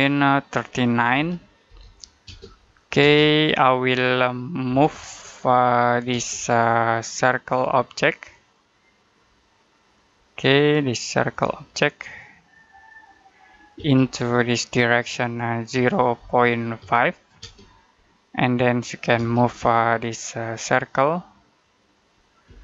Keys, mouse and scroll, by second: 1.0-2.1 typing, 4.5 m, 6.0 space, 8.2 click, 13.6 space, 14.0 click, 15.6-17.3 typing, 20.3 click, 22.3 space, 22.5 click.